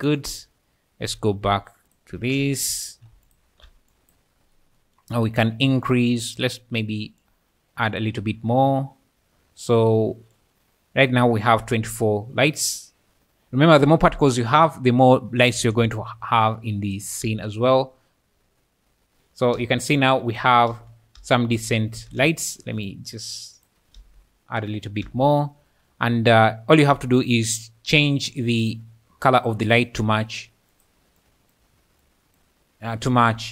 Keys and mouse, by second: 0.0 click, 3.3 alt+shift+click, 3.9 click, 7.2 click, 10.5 click, 12.9 click, 15.6 alt+a, 16.9 shift+click, 17.3 space, 19.6 space, 20.7 space, 21.2 space, 21.5 space, 22.0 space, 22.9 click, 23.9 space, 25.1 space, 27.7 click, 28.6 click, 29.7 click.